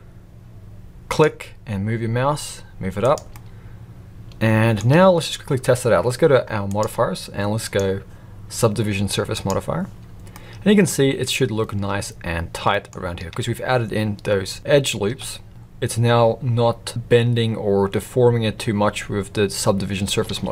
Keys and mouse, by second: 3.3-4.8 middle drag, 8.5-10.3 drag, 10.3 middle click, 12.7 middle click, 13.2 Tab, 15.1 Tab, 20.3 alt+a.